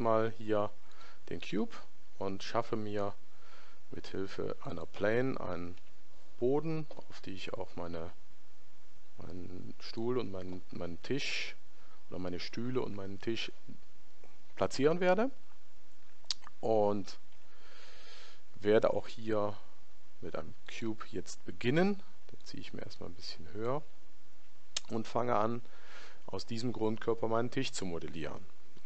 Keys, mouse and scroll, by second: 0.2 Delete, 2.6 shift+a, 5.8 s, 22.5 click.